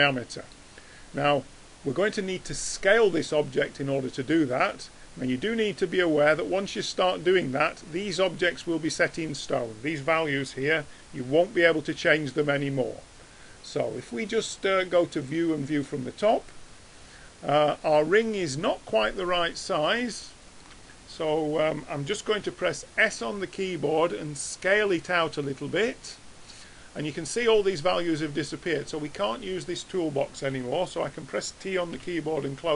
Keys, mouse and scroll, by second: 17.8-20.1 middle drag, 20.2 middle click, 20.4-23.2 middle drag, 23.2 s, 32.0 t.